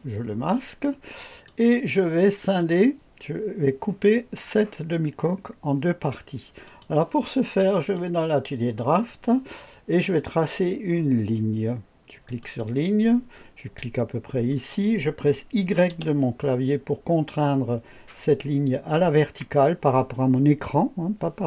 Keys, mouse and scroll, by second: 1.1-1.6 drag, 2.4 click, 6.6 click, 7.8 click, 8.8 click, 12.4 click, 14.5 click, 14.9 click, 15.9 y.